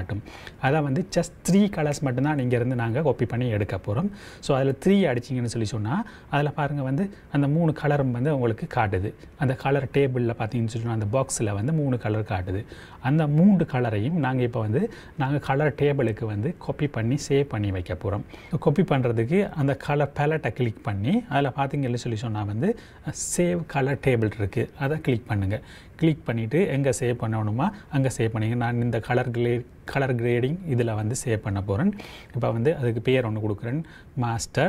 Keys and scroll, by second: 3.4 KP_3, 11.8 j.